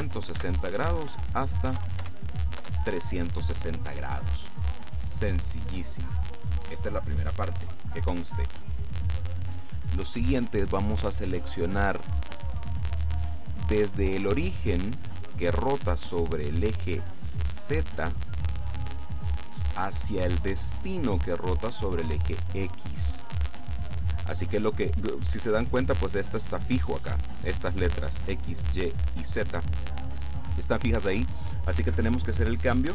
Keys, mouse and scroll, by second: 0.0 KP_0, 0.4 Tab, 1.8 KP_3, 1.9 KP_6, 2.1 KP_0, 2.7 KP_Enter.